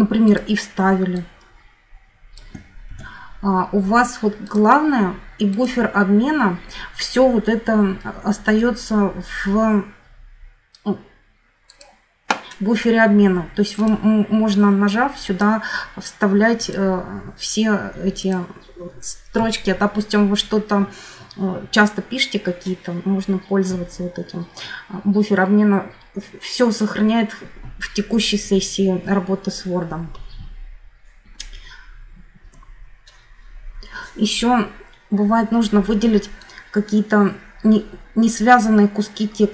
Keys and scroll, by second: 2.6 ctrl+c, 32.3 F9.